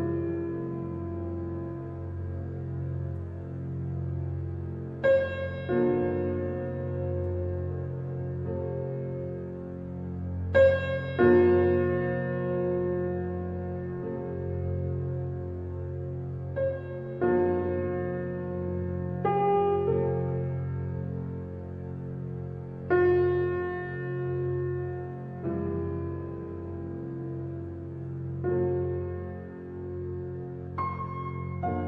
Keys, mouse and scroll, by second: 1.4 middle click, 2.2 Tab, 2.8 middle click, 3.6 alt+h, 5.2 click, 7.3 Tab, 8.0 middle click, 9.0-9.7 scroll up 1, 9.7 s, 13.1 click, 16.1-17.1 drag, 18.6 click, 19.3 s, 21.8-23.9 middle drag, 23.9 Tab, 26.1 shift+h, 26.8-27.5 middle drag, 27.5 click, 27.9 Tab, 28.4-30.5 middle drag, 30.5 e.